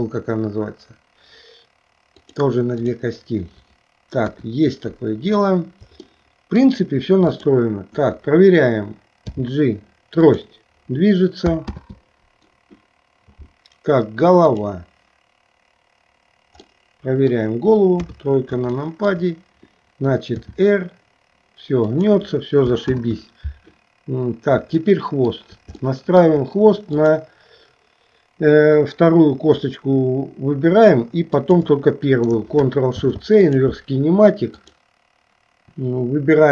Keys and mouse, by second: 2.2 click, 3.0 click, 4.3 KP_1, 6.3 middle click, 9.3 g, 11.8 ctrl+z, 14.5 click, 16.7 middle click, 18.1 KP_3, 18.9 shift+middle click, 20.5 r, 23.0 ctrl+z, 24.9 shift+middle click, 26.0 shift+middle click, 31.4 shift+click, 33.0 ctrl+shift+c.